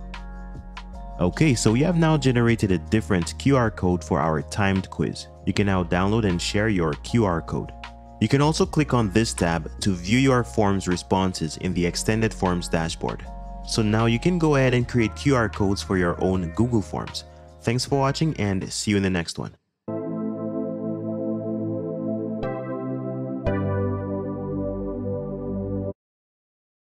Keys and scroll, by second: 0.6 Return.